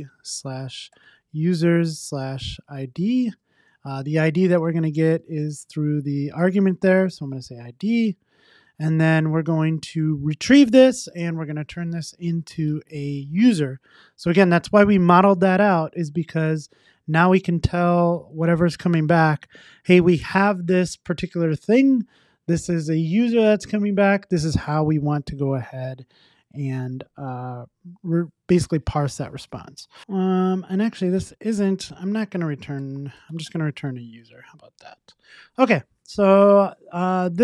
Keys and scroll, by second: 10.3 Return, 15.8 Tab, 16.8 Tab, 34.4 super+s.